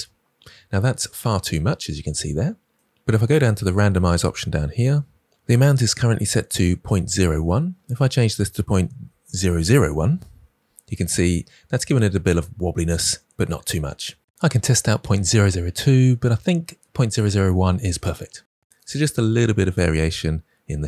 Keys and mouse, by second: 6.5-10.2 drag, 14.3 click.